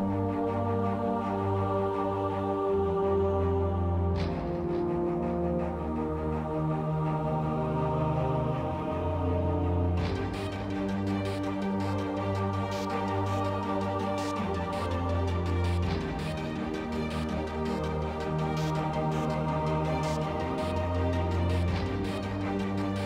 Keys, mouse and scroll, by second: 0.3 x, 1.1 shift+a, 2.5 Tab, 3.3 ctrl+Tab, 5.3 e, 6.1 ctrl+z, 6.8 a, 8.5 g, 9.2 a, 9.4 a, 9.7 Tab, 10.2 ctrl+2, 10.7 Tab, 13.3 e, 17.5 s, 18.9 g, 20.1 x, 22.0 ctrl+Tab.